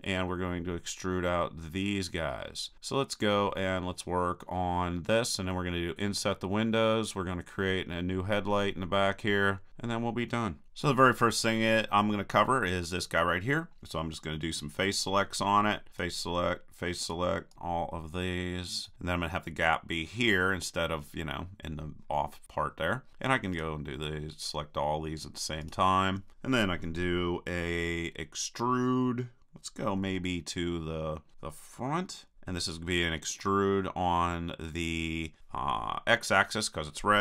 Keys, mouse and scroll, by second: 6.6-8.5 middle drag, 10.9-13.8 drag, 14.9-20.4 drag, 16.0 right click, 23.5-27.0 drag, 32.3 KP_1.